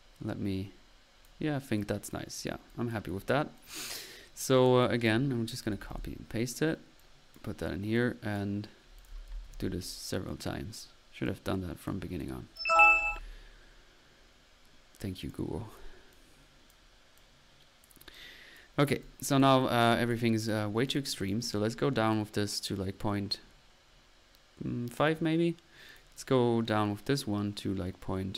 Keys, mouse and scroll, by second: 2.4 middle click, 2.6-5.3 typing, 2.7 click, 3.5 click, 4.3 middle click, 4.8 click, 5.7 ctrl+c, 5.9 ctrl+v, 7.0-7.4 ctrl+drag, 7.1-7.9 typing, 9.3 ctrl+c, 9.4 ctrl+v, 11.7 click, 12.4-13.2 typing, 12.4 click, 14.9-15.6 typing, 16.1-17.1 drag, 17.9 drag, 18.6 click, 19.0 click, 19.6 click, 20.2 click, 20.4 middle click, 20.8 click, 21.3-21.7 drag, 21.9 click, 23.3-25.0 drag, 25.9 click, 26.7-28.3 drag.